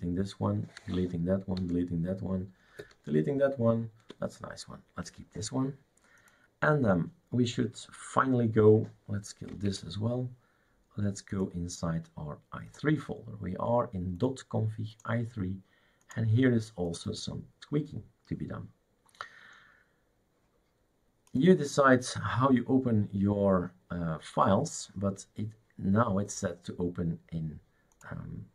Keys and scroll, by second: 0.0 alt+t, 0.8 alt+t, 1.6 alt+t, 2.8 alt+t, 9.7 shift+super+q.